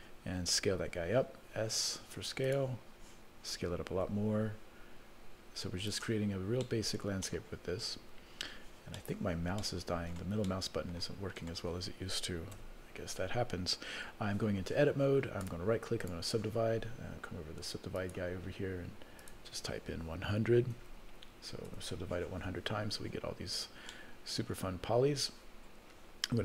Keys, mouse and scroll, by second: 0.8 s, 4.0 s, 6.2-7.0 scroll down 4, 7.0 middle click, 7.8 middle click, 8.0-8.5 scroll down 3, 8.5-9.4 scroll up 5, 9.9 middle click, 10.7 middle click, 11.3 middle click, 12.6 Tab, 15.4 right click, 18.0 click, 19.2-22.0 drag, 20.9 KP_0, 22.8-23.3 scroll down 1, 23.5-24.6 scroll up 2, 24.6 scroll down 1, 24.6 scroll down 2, 25.4-26.0 scroll up 1.